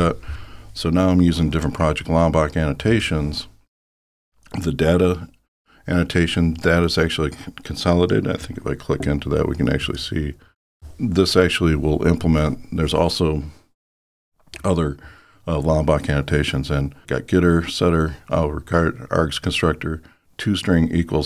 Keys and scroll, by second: 10.1 super+b.